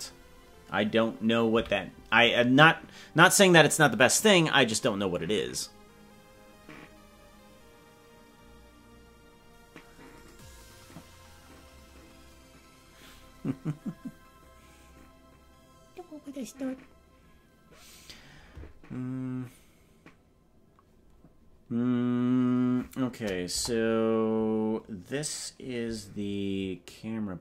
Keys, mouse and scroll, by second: 1.6 KP_Decimal, 23.6 KP_0.